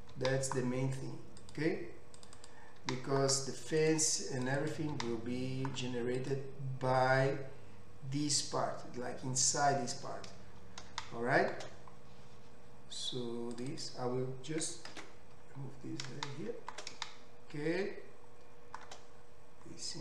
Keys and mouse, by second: 0.1 g, 2.4 click, 2.8 g, 4.6 click, 5.0 g, 10.5-13.7 middle drag, 13.7 click, 13.8-20.0 middle drag, 15.0 ctrl+x.